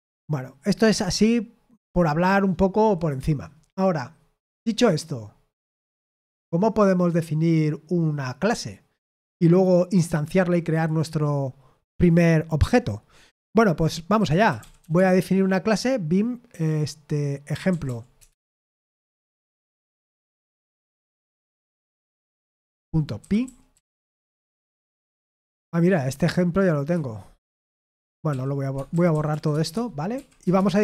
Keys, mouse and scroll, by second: 14.2-15.3 typing, 17.4-24.2 typing, 28.2-30.1 typing, 30.4 Return.